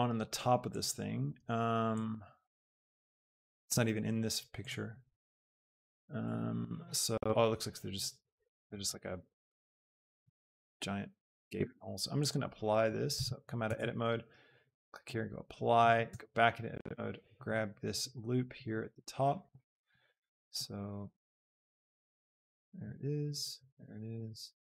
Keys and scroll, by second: 13.1 alt+Tab, 16.0 Tab.